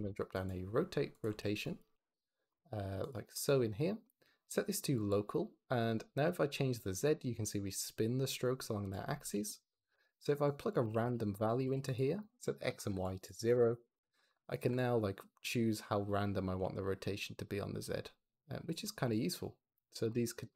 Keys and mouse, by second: 1.2 x, 1.5 click, 3.2 click, 5.8-8.8 drag, 9.1 ctrl+z, 9.8 shift+a, 10.4 click, 13.0 click, 14.7-16.5 drag, 16.5-18.6 shift+middle drag, 19.1 shift+click.